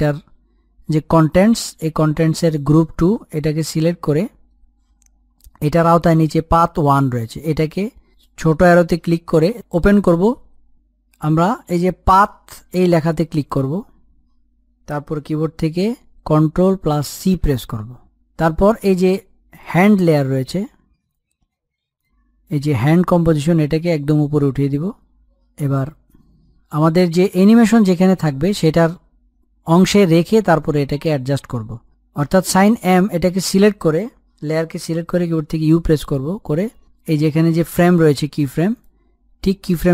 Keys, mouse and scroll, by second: 3.9 click, 4.7-5.1 scroll down 1, 5.1-6.9 scroll up 1, 9.5 click, 16.7 ctrl+Num_Lock, 18.9 ctrl+c, 19.7 scroll up 1, 20.7 click, 21.9-22.5 scroll up 1, 22.5-26.5 drag, 34.1 click, 36.9 u, 38.3-39.9 drag.